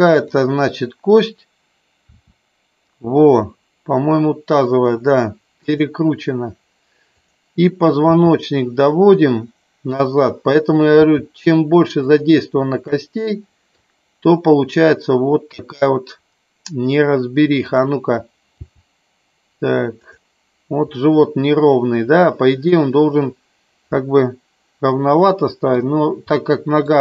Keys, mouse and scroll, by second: 2.1 r, 5.6 click, 7.1 click, 8.1 r, 9.1 click, 9.9 click, 11.9 click, 12.8 middle click, 18.6 g, 20.0 click, 23.8 scroll up 1, 24.0-25.7 middle drag, 26.2 scroll up 1, 26.3 middle click.